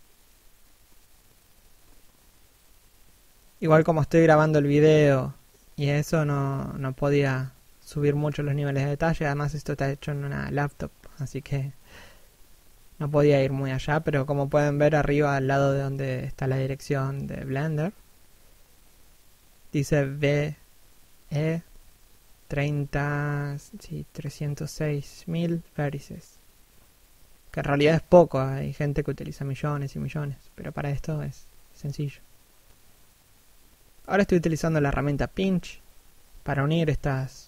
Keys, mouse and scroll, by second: 0.5 middle click, 1.0 scroll up 1, 1.3 click, 7.1 scroll down 1, 8.3 middle click, 9.8 scroll up 1, 10.3 middle click, 11.6 click, 23.4 middle click, 24.3 click, 29.4 shift+middle click, 31.3 click.